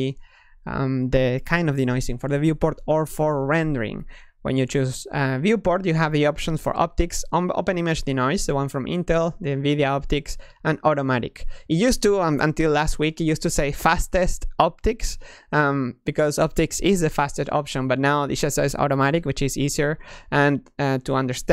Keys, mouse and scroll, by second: 5.5-8.6 drag.